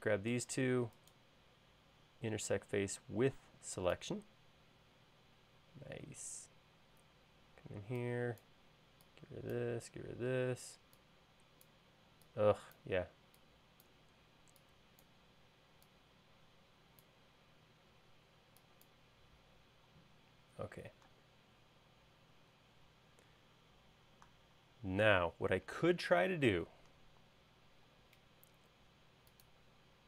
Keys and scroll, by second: 7.6 e, 21.1 space, 27.9 l.